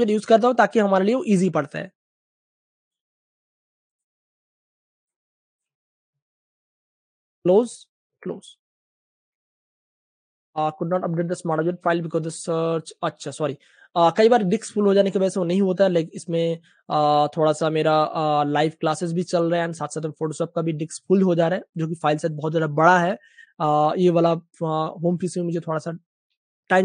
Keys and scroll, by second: 5.9 super+w, 6.4 Return, 7.7 super+w, 8.1 Return, 12.5 v, 25.8 space.